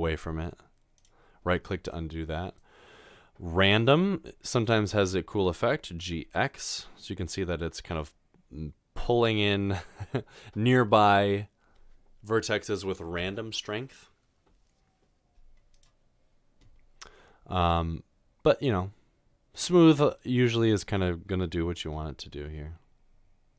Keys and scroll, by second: 6.0 typing, 21.8 typing.